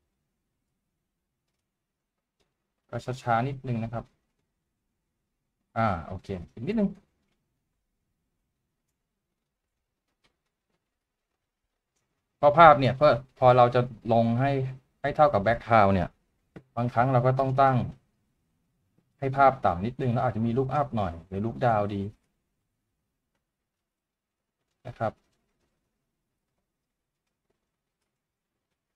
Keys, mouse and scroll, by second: 14.3 right click, 16.5 w, 18.8 typing.